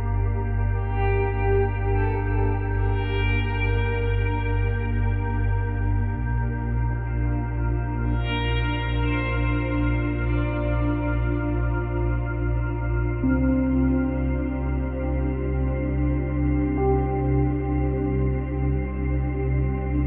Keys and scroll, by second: 15.8 space, 17.0 space.